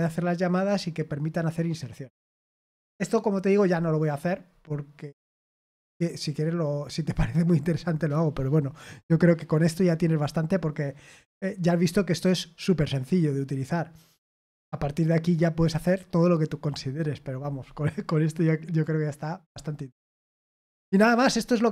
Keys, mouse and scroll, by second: 4.5-5.6 scroll up 2, 6.2-6.8 scroll up 1.